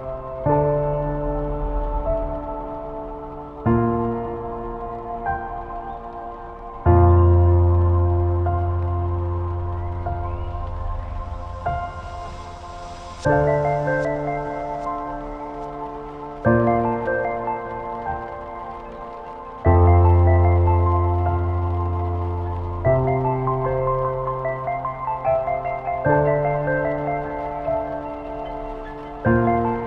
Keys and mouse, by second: 0.0-3.0 typing, 4.0 z, 4.5 Tab, 5.5 shift+drag, 5.9 ctrl+s, 6.7-7.7 shift+drag, 8.1-8.5 shift+drag, 8.9-9.3 shift+drag, 9.5 Tab, 9.9 a, 10.2 a, 10.5 a, 11.1 space, 13.1 Tab, 14.4-15.6 drag, 15.9-18.4 drag, 19.4-20.6 drag, 20.8 shift+drag, 21.3 ctrl+s, 21.4-22.2 drag, 24.0-24.8 shift+drag, 25.0 shift+a, 26.7 shift+click, 27.1 Tab, 27.4 r, 29.6 s.